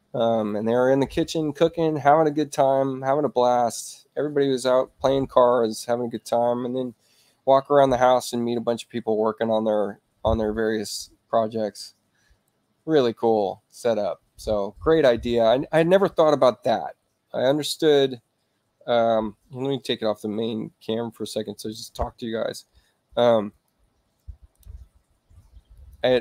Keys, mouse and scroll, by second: 23.5 click, 25.7 click.